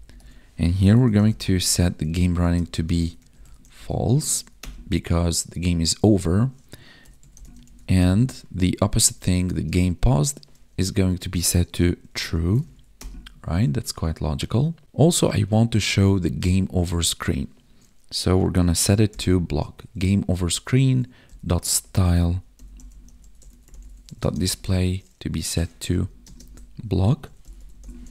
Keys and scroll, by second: 1.8 Tab, 2.4 space, 2.7 space, 4.3 ctrl+s, 8.5 Tab, 9.1 space, 9.5 space, 12.6 ctrl+s, 20.4 Tab, 24.1 space, 25.8 Left, 26.2 space, 26.4 Right.